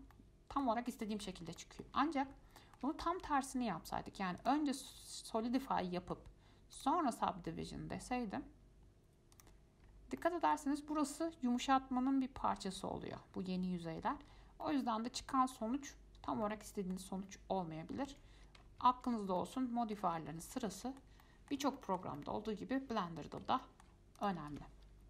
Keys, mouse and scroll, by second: 0.0-0.3 scroll down 2, 0.3-1.4 middle drag, 1.4-1.8 scroll up 6, 1.8-4.6 shift+middle drag, 4.6 click, 5.8-7.0 middle drag, 7.0-10.0 drag, 10.0-10.4 scroll up 2, 10.4-13.4 middle drag, 14.4-14.8 scroll down 4, 14.8-16.0 middle drag, 16.0-16.6 scroll down 9, 16.6 middle click, 17.4-17.9 scroll up 4, 18.3 ctrl+z, 18.8 scroll up 2, 19.1 ctrl+z, 19.4 scroll up 2, 19.6-20.2 middle drag, 20.2-21.0 scroll down 10, 21.0-24.4 shift+middle drag, 24.4 click, 24.7 x.